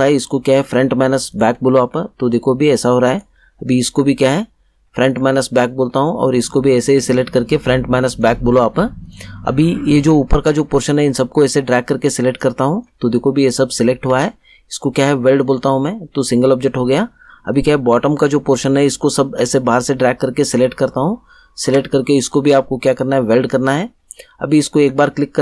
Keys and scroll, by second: 14.0 ctrl+z, 21.6 ctrl+z.